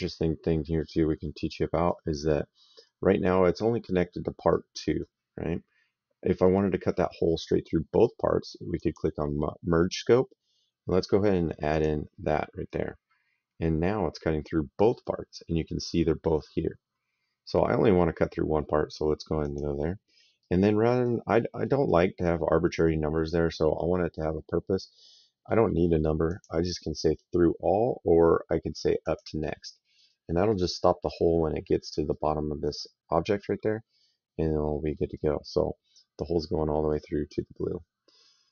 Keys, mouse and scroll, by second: 4.3 right click, 8.7 click, 11.6 click, 12.6 right click, 19.3 click, 20.3 right click, 21.3 middle click, 26.2 click, 28.9 click, 30.3 right click, 31.9 right click, 34.5 middle click, 35.0 right click, 38.1 right click.